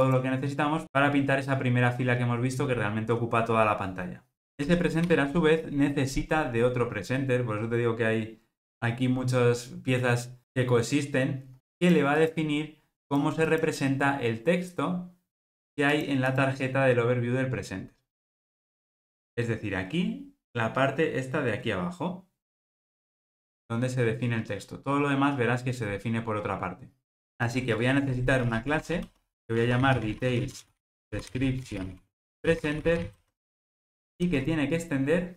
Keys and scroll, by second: 5.1 super+p.